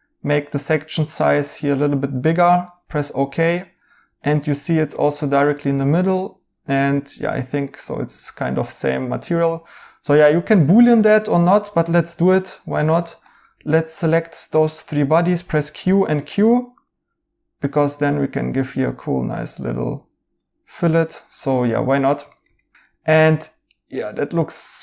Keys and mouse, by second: 2.9 right click, 7.2 right click, 11.9 alt+z, 15.2-15.7 typing, 21.6 right click, 23.2 Tab, 24.0 right click.